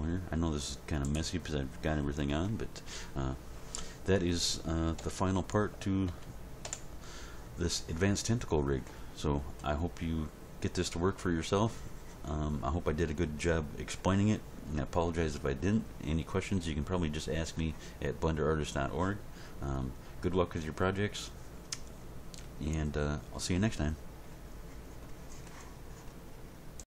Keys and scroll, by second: 5.0 End, 5.7 Page_Down, 6.1 End, 6.6 Home.